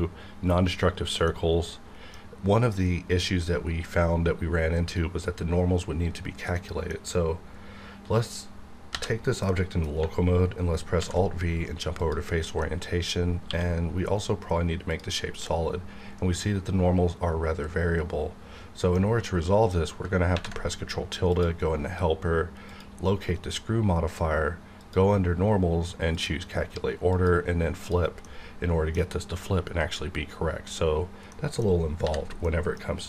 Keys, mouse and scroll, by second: 1.3-6.5 middle drag, 6.8-8.9 middle drag, 8.9 /, 9.5-11.0 middle drag, 11.0 alt+v, 12.0 click, 12.6 middle click, 13.5 q, 14.9 click, 15.4-18.9 middle drag, 19.0-20.0 scroll down 1, 20.3 ctrl+`, 21.3 click, 27.8 click, 28.2 middle click, 28.9-30.9 scroll down 1, 31.3 middle click, 32.0 /, 32.4 middle click.